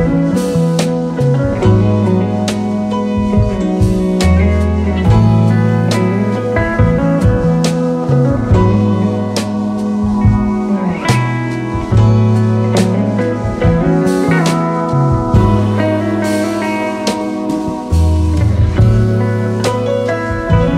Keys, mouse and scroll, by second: 12.5 alt+Num_Lock, 12.5 click.